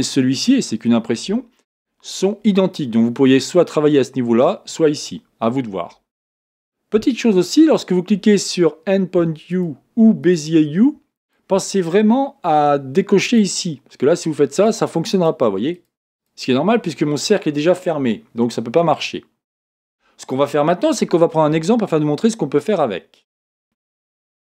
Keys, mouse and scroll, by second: 9.5 click, 11.2 click, 13.3 click, 14.5 click, 15.1 click, 15.7 click, 16.1 click, 24.4-24.5 shift+middle drag.